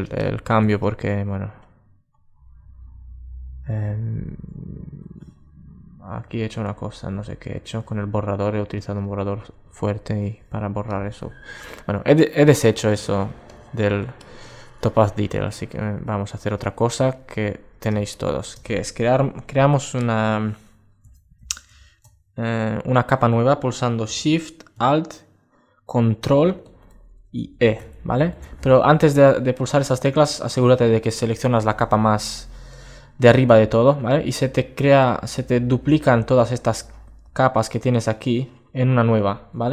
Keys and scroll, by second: 14.7 alt+space, 16.4 super+space, 27.6 ctrl+alt+shift+e.